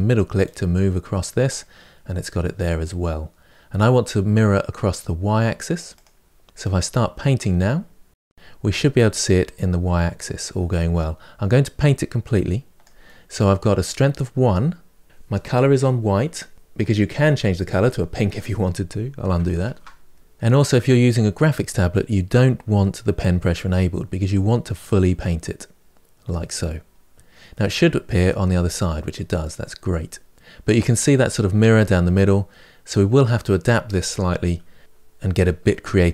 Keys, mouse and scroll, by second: 5.8 click, 6.5-8.2 drag, 16.9-19.6 drag, 19.6 ctrl+z, 24.1-27.3 drag, 27.3-30.3 middle drag.